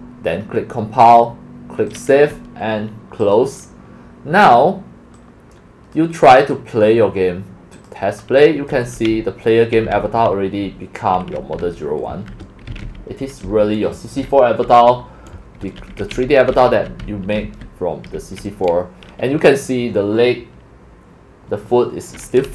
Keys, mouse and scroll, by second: 1.0 click, 1.9 click, 3.4 click, 5.1 click, 5.9 click, 6.4 click, 7.7 click, 8.8 click, 8.9-18.2 typing, 16.0 click, 20.1-22.5 typing.